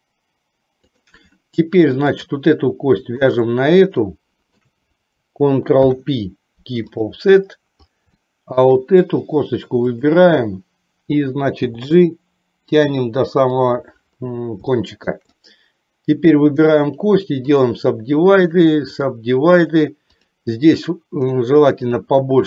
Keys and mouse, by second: 2.1 click, 3.3 shift+click, 4.0 shift+middle click, 5.9 ctrl+p, 8.3 shift+middle click, 9.9 click, 11.7 g, 14.9 shift+middle click, 15.5 click, 16.8 right click, 18.7 right click, 19.8 right click, 21.4 right click.